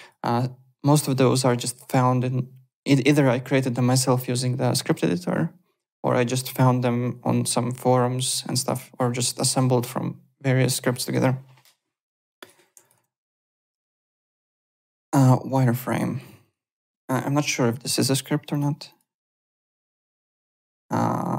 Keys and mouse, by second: 12.4 click, 13.6 alt+click, 15.8 click, 17.2 Home, 18.5 click.